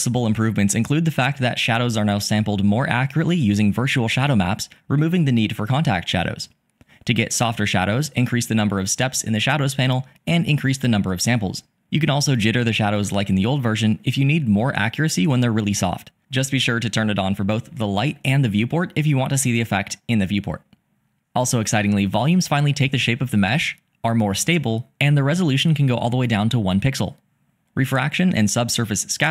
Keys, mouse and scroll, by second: 5.6-7.5 drag, 9.6-10.7 drag, 11.6 click, 14.1 click, 15.3 click, 16.2 click, 17.5 click.